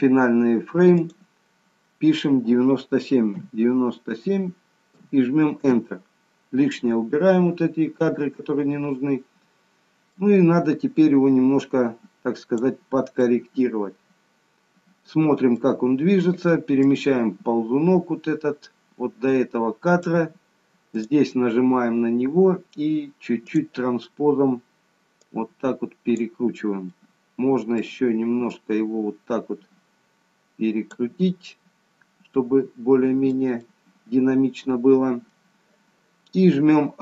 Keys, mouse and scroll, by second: 1.0 click, 10.2 click, 13.2 middle click, 16.9 click, 21.0 click, 23.5 click, 25.2 click, 27.0 middle click, 28.6 click, 31.5 middle click, 33.6 middle click.